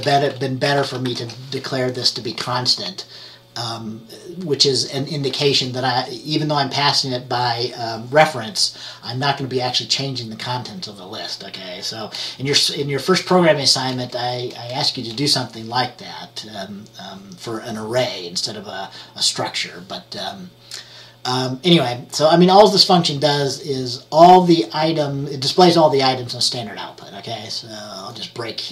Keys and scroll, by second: 0.0-1.7 typing, 13.5-14.8 typing.